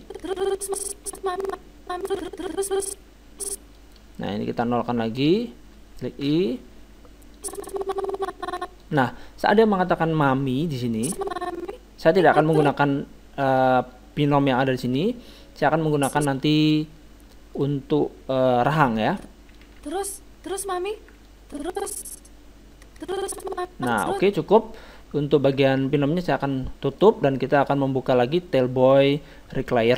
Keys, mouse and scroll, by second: 0.1-1.8 drag, 4.5-6.6 drag, 6.3 i, 7.4-9.2 drag, 11.0-13.2 drag, 15.8-18.2 drag, 17.3-19.6 middle drag, 19.1-20.9 drag, 19.6 alt+a, 21.0 alt+a, 21.3-23.0 drag, 26.3-28.7 drag, 29.7-29.9 drag.